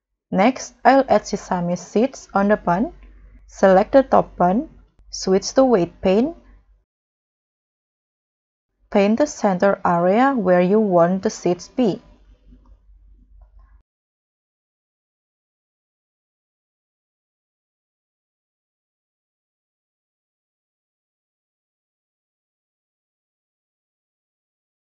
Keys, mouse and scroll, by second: 0.4 middle click, 1.0 scroll down 3, 1.3 scroll up 3, 8.5 scroll up 5, 9.0 middle click, 13.4 middle click, 13.9 middle click, 14.0-14.3 scroll down 1, 14.3-14.9 scroll up 4, 14.9 scroll down 1, 15.2 middle click, 15.5-15.9 scroll down 4.